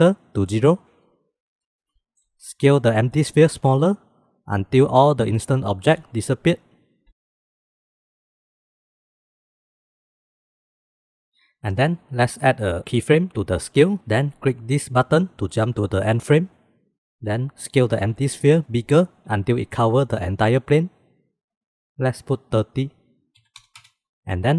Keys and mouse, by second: 1.8-2.7 shift+middle drag, 2.7 s, 3.6 middle click, 4.1 middle click, 4.6 shift+middle click, 5.2 s, 6.7 s, 8.0-8.4 middle drag, 9.6 middle click, 10.9-11.3 middle drag, 17.8 s, 22.0-24.1 drag.